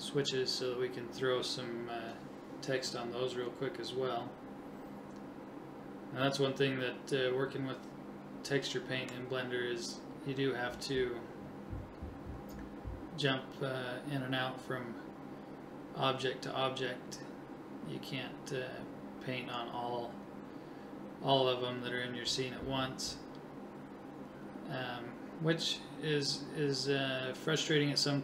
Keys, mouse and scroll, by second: 0.5 click, 4.1-8.1 middle drag, 8.4 KP_7, 14.1 right click, 18.5-20.1 drag, 20.1 middle click, 20.7 right click, 21.3 click.